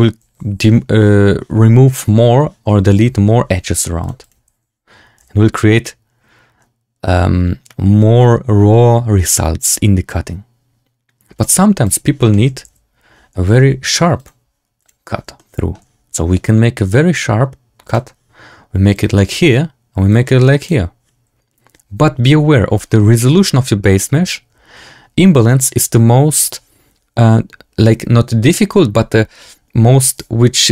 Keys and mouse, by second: 3.9 click, 4.1 click, 5.3 z, 11.8 click, 12.2 shift+click, 12.6 z, 14.2-14.8 drag, 15.3-15.6 shift+drag, 17.8-19.2 drag, 20.0 click.